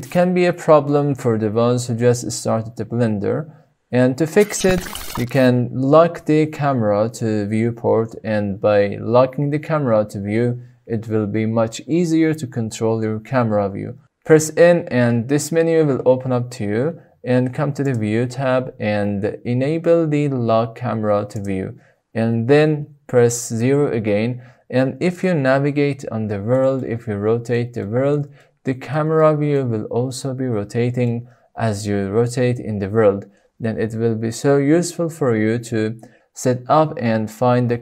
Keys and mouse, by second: 14.1 n, 21.3 click, 23.6 KP_0, 25.3-26.5 shift+middle drag, 26.8 middle click, 27.7-28.1 shift+drag, 28.5 middle click, 29.1 shift+click, 31.2 shift+click.